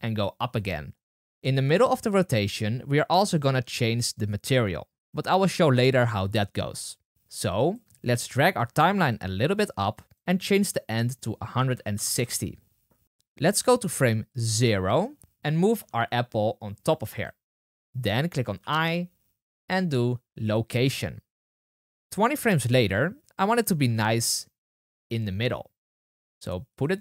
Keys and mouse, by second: 9.0-17.2 drag, 15.2 g, 18.5 i, 22.2-26.7 drag, 23.8 g.